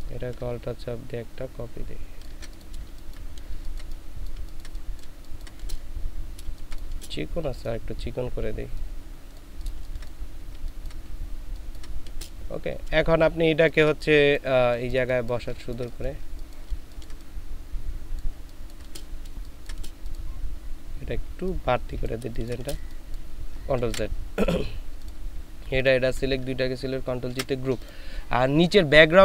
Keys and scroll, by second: 2.8 ctrl+alt+shift+space, 3.5 ctrl+alt+shift+space, 4.3 ctrl+alt+shift+space, 6.4 ctrl+space, 9.8 ctrl+space, 13.1 ctrl+space, 18.3 ctrl+space, 19.2 ctrl+space, 22.3 ctrl+space, 23.8 ctrl+z, 27.3 ctrl+shift+g.